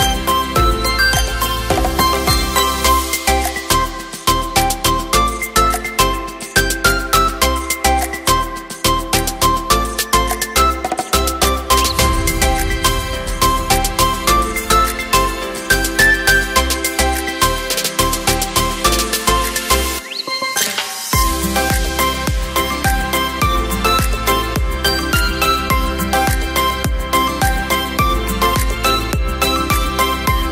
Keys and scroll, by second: 22.0 ctrl+t, 27.6 space.